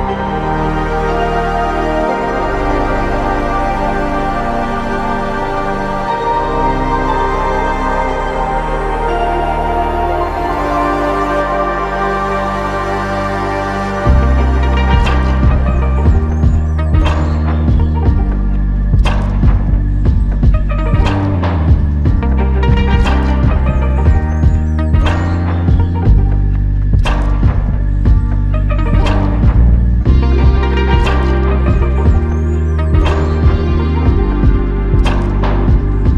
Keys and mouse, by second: 2.6 double click, 32.5 double click.